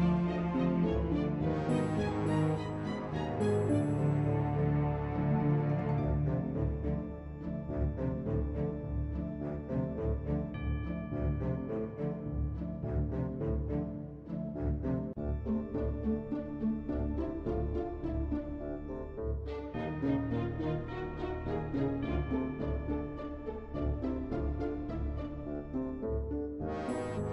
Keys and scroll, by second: 12.4 typing, 26.3 r.